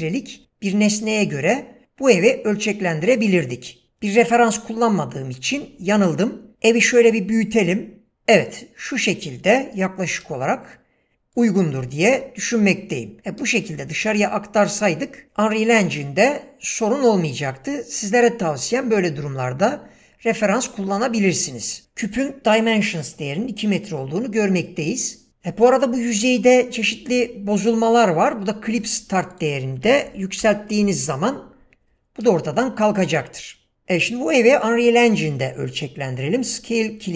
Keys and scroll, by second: 6.5 s, 10.1 g, 30.1-30.4 typing, 30.8 Return.